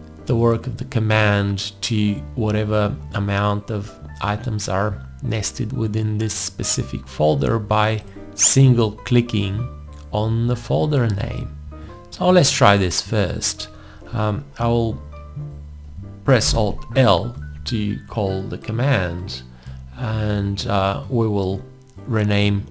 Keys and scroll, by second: 16.5 alt+l.